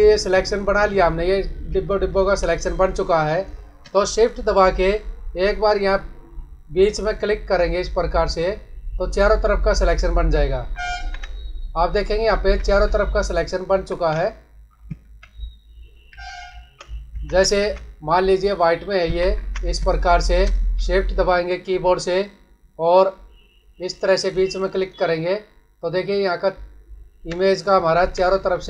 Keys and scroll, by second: 1.6 space, 10.5 ctrl+-, 12.3 ctrl+=, 14.1 ctrl+-, 14.9 ctrl+alt+z, 17.2 ctrl+=, 19.1 ctrl+=, 19.7 space, 27.9 ctrl+-.